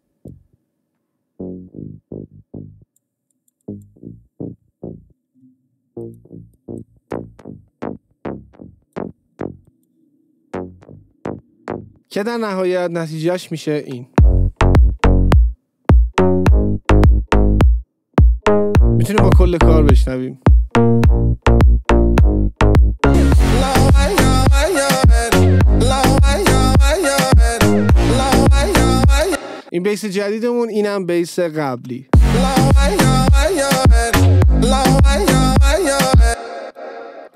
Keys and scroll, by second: 14.2 space, 29.4 space, 32.2 space, 36.4 space.